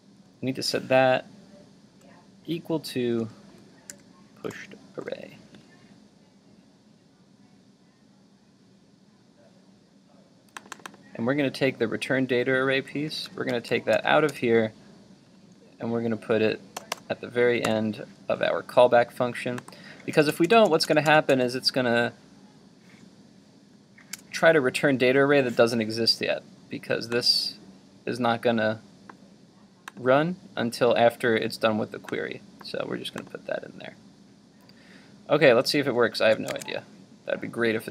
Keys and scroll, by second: 12.7 super+x, 17.7 super+v, 36.2 super+s, 36.6 super+Tab.